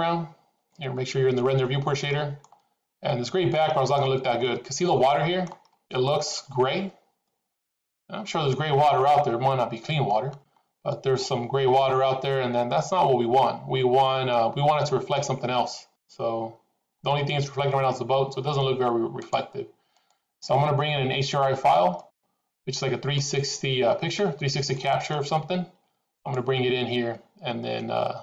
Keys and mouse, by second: 0.0 click, 2.4-3.5 middle drag, 4.4-5.5 middle drag, 6.3-10.1 middle drag, 10.9-14.3 middle drag, 15.2-17.3 middle drag, 19.1-20.3 drag, 21.9-23.1 middle drag, 24.7 middle click, 26.3 click.